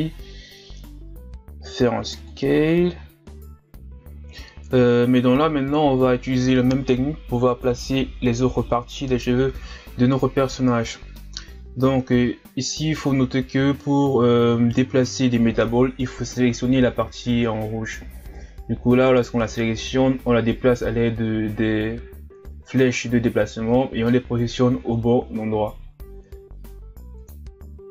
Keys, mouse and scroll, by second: 0.2-0.7 scroll up 1, 0.7 s, 4.2 KP_1, 4.4 scroll down 4, 4.5-4.9 scroll up 2, 4.9 shift+d, 5.5 s, 8.1 right click, 8.4 ctrl+z, 8.7 right click, 9.2 ctrl+z, 9.7 ctrl+z, 9.8 right click, 10.2 ctrl+z, 10.4-10.9 scroll down 1, 10.9 right click, 11.1 ctrl+z, 11.5 right click, 12.2 ctrl+z, 12.6 click, 12.7-13.1 scroll up 5, 13.3 ctrl+z, 13.5 right click, 13.7 ctrl+z, 13.8 right click, 14.3 ctrl+z, 15.8 KP_3, 16.3 click, 16.8-17.4 scroll up 1, 17.4 click, 18.3 KP_1, 18.6-19.0 scroll down 2, 19.0 KP_3, 19.2 scroll up 2, 19.5 shift+d, 20.2 s, 20.8 alt+s, 21.0 right click, 21.5 click, 21.9 KP_1, 22.0 Tab, 22.2-22.8 scroll down 3, 22.8 scroll up 2, 22.9-23.2 middle drag, 23.4 Tab, 23.5 middle click, 23.6 right click, 24.2 s, 24.8 middle click, 25.0 click, 25.6 middle click, 25.8 KP_1, 25.9 Tab, 26.1 scroll up 3, 26.2 Tab, 26.5 s, 27.1 Tab, 27.2 a, 27.3-27.9 scroll down 1.